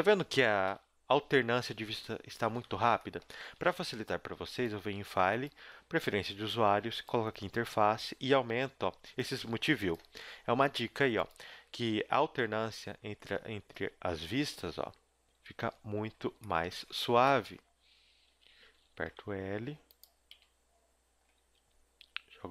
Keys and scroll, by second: 0.6 KP_1, 1.2 z, 2.3 a, 2.7 z, 3.4 a, 12.0 KP_1, 12.9 KP_4, 14.2 KP_7, 15.3 KP_1, 17.2-20.3 typing, 21.4 g.